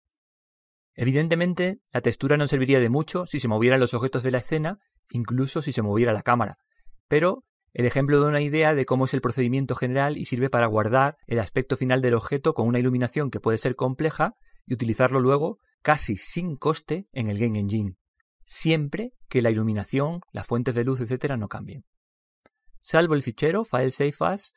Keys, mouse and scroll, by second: 4.2-6.0 middle drag, 6.2 scroll down 1, 6.5-8.7 middle drag, 9.1-9.8 scroll up 1, 9.8-11.6 middle drag, 23.6 click.